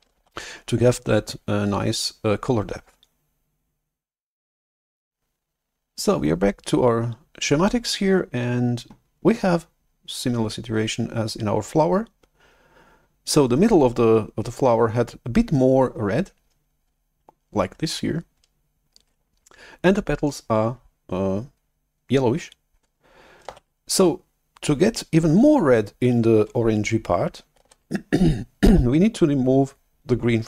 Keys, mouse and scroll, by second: 0.2 shift+F11, 5.2 click, 23.5 shift+super+F11, 27.5 shift+super+F11.